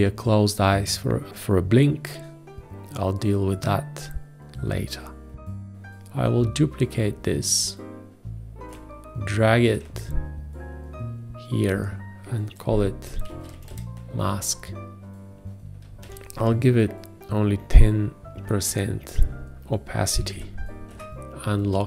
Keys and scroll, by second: 13.2-14.7 typing, 20.5-21.3 typing.